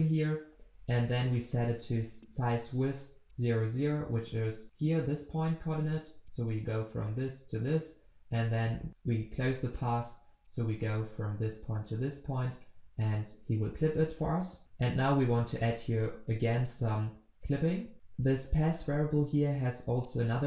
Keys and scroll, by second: 17.9 ctrl+z.